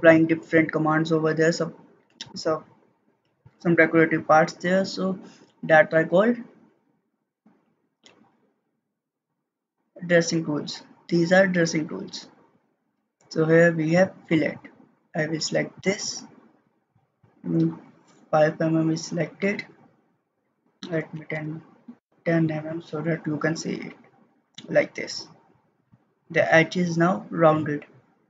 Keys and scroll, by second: 20.9-21.8 typing, 22.0 Return.